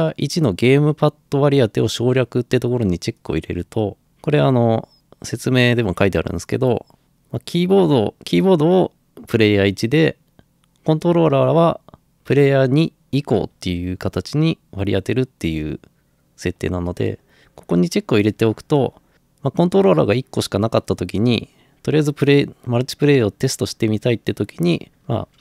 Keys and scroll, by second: 24.5-25.4 typing.